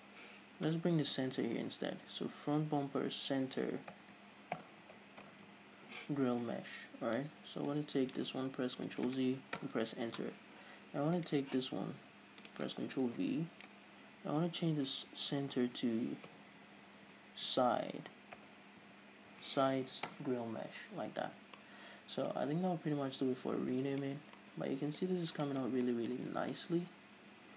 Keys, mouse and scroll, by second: 2.9 Left, 11.7 right click, 13.0-22.2 drag, 15.9 Left, 17.0 BackSpace, 20.7 Return, 21.7 a, 22.0 scroll down 2, 22.2-27.5 middle drag, 24.7 scroll up 2, 27.1-27.5 scroll up 2.